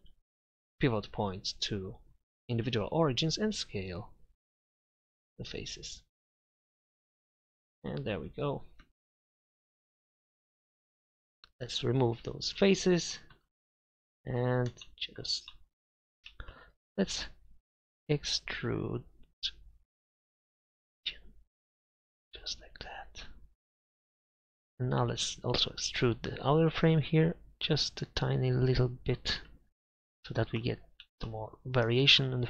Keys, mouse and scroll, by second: 0.0 click, 3.6 s, 5.2-6.8 drag, 8.5 middle click, 10.2 s, 11.4 Delete, 12.9 middle click, 13.5 middle click, 21.3-22.9 drag, 27.1 e, 29.4 Tab.